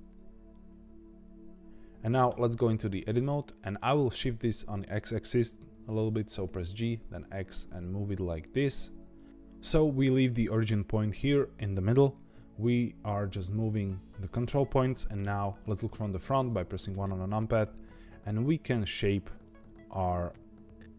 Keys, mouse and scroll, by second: 1.6 shift+middle click, 2.2 Tab, 2.9-6.1 middle drag, 6.4 g, 9.2 Tab, 12.0 g, 15.2 KP_1, 16.3 shift+middle click, 17.0-17.7 scroll up 4, 17.7-18.3 scroll down 1, 18.3-18.6 scroll down 1, 18.6 shift+middle click, 19.4 click, 20.3 g.